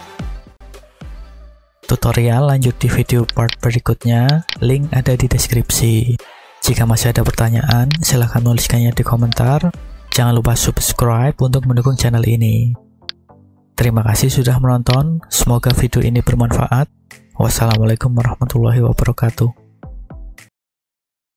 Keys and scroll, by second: 5.1 g, 5.6 x.